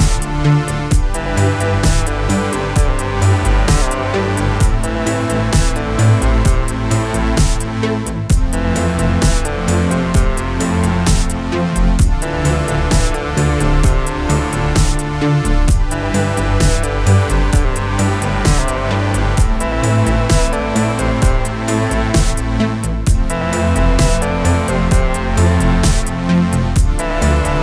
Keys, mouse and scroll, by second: 1.6 3, 2.1 click, 4.6 middle click, 5.1 scroll down 2, 5.3-8.9 middle drag, 8.9-9.6 scroll up 2, 10.0 click, 10.5 scroll up 1, 10.6-11.9 middle drag, 11.9 shift+click, 13.0 click, 13.4-15.3 middle drag, 15.3-15.6 scroll up 3, 15.9-19.1 middle drag, 19.1-20.1 scroll up 2, 20.1 click, 21.3 shift+click, 21.7 middle click, 22.6 scroll up 2, 23.0 middle click, 23.9 shift+click, 24.3 shift+click, 24.6 scroll down 2, 24.9-26.0 middle drag, 26.0-27.6 scroll up 2.